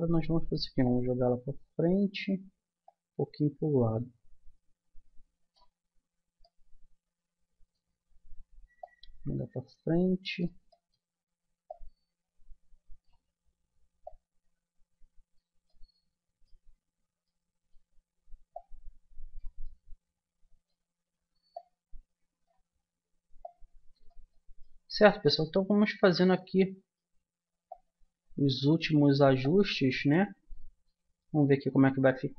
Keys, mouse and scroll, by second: 0.8-2.5 drag, 2.5 middle click, 2.9-4.7 middle drag, 6.1 middle click, 8.8-10.6 drag, 10.6 middle click, 11.7 middle click, 12.5 click, 14.0-15.6 drag, 18.5 middle click, 20.2-21.5 middle drag, 22.5-24.3 drag, 24.3-25.4 middle drag, 26.9 middle click, 27.7-29.3 middle drag, 29.3-30.5 drag, 30.5-32.3 middle drag.